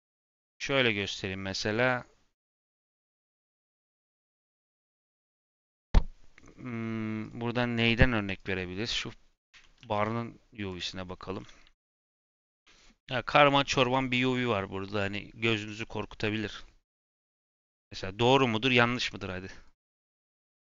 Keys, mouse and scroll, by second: 0.0 click, 0.5-1.1 scroll down 11, 1.1-2.6 middle drag, 3.0 click, 3.6 middle click, 4.2 click, 4.4 shift+middle click, 5.1-6.1 scroll up 3, 5.2 shift+middle click, 7.1 click, 8.3 click, 9.4 Tab, 9.7 a, 10.7 click, 11.7 n, 12.8 click.